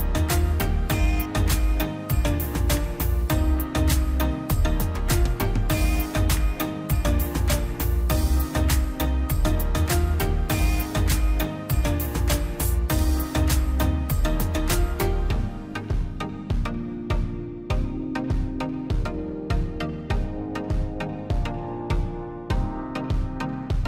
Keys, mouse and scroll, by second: 0.7 Delete, 0.8-1.5 scroll down 1, 1.5 middle click, 1.7-2.3 scroll down 1, 2.3 middle click, 3.1 scroll up 1, 5.0 click, 6.8 Escape, 7.4 click, 8.9 scroll down 1, 9.6 scroll up 1, 10.1 click, 11.7 scroll down 1, 12.2 click, 13.2 scroll down 1, 13.4 middle click, 13.9 click, 14.5 ctrl+z, 15.2 click, 15.5-15.8 scroll up 1, 15.8 click, 18.5 click, 18.8-19.2 scroll up 1, 19.2-22.2 drag, 22.5-22.9 scroll up 1, 23.2 click.